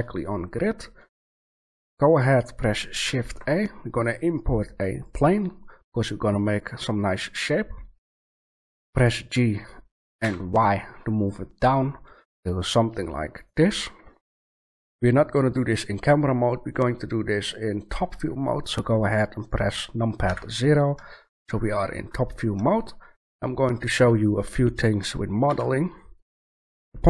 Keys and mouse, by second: 3.0 shift+a, 8.8 g, 9.0-11.1 middle drag, 11.4-12.2 middle drag, 13.4-14.8 middle drag, 20.2 KP_7, 21.2 middle click, 25.2 middle click, 25.4 Tab.